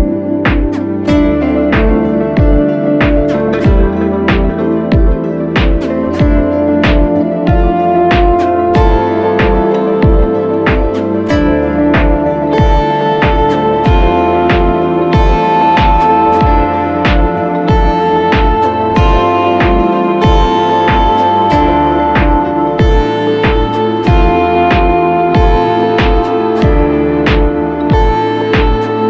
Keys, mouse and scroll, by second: 1.2 alt+shift+click, 3.9 Return, 4.3 ctrl+t, 4.5 alt+shift+click, 10.0 ctrl+-, 10.4 alt+shift+click, 11.6 alt+shift+click, 13.0 Right, 13.4-13.8 Down, 14.1 Down, 14.3 Down, 14.6 Return, 18.3-18.8 alt+scroll up 1, 18.8-20.3 alt+scroll up 1.